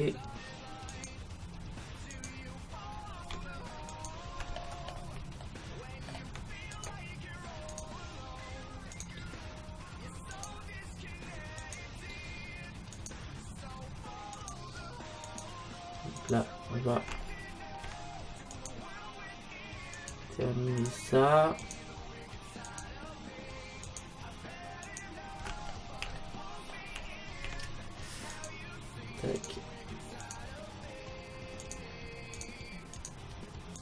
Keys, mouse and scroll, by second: 3.7 right click, 4.5-7.2 middle drag, 6.7-26.2 right drag, 26.2 middle click, 26.6 right click, 26.7-28.1 middle drag, 28.3-33.8 right drag.